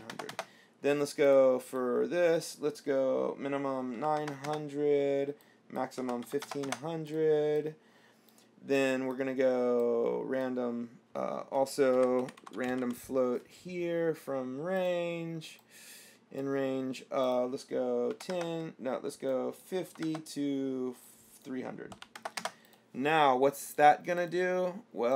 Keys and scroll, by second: 0.2 KP_9, 0.3 KP_0, 4.2 KP_9, 4.4 KP_0, 6.2 KP_1, 6.4 KP_5, 6.7 KP_0, 11.9-13.6 typing, 18.4 KP_1, 18.5 KP_0, 20.1 KP_5, 20.3 KP_0, 22.2 KP_3, 22.4 KP_0.